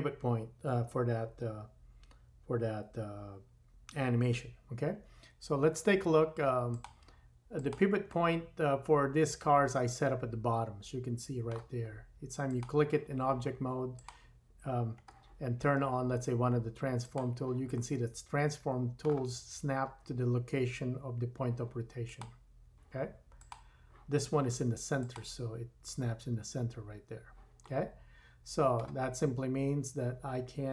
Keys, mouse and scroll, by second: 6.7 click, 7.5 drag, 8.2-11.2 middle drag, 12.5 click, 12.8-13.9 drag, 14.1-17.0 drag, 17.8 middle click, 19.4-20.0 scroll up 2, 22.3-23.6 drag, 25.0 click, 27.7-30.7 middle drag, 29.2-29.5 scroll down 2.